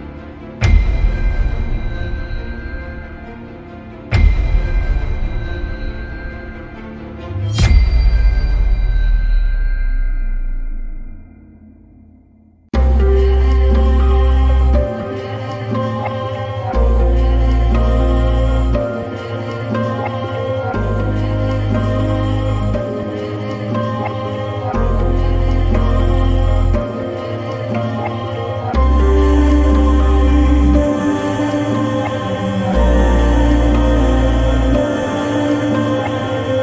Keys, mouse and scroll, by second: 2.9-4.5 drag, 8.3-9.3 drag, 14.9 click, 15.8 click, 17.1 click, 18.6 click, 20.6-23.0 drag, 23.3 click, 24.3 click, 27.0 drag, 31.1-35.1 drag, 36.0 click.